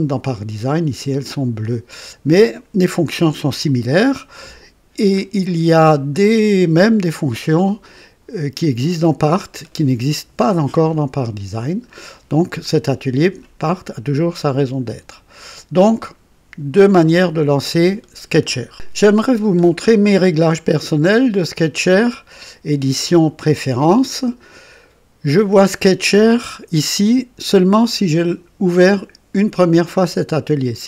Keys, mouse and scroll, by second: 4.7 scroll down 2, 5.4-6.3 drag, 12.5 click, 15.3 click, 16.8 click, 20.9 click, 24.1 click.